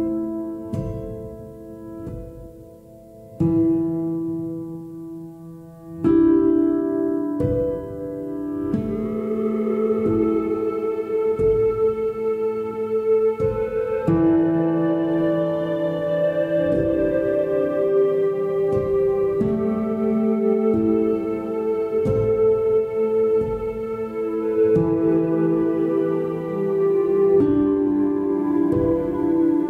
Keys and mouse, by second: 0.7 g, 2.1 g, 4.0 x, 6.0-7.0 right drag, 7.8 click, 12.2 Tab, 17.0 click, 18.9 ctrl+p, 21.9 alt+p, 24.9 e, 25.7-27.1 right drag.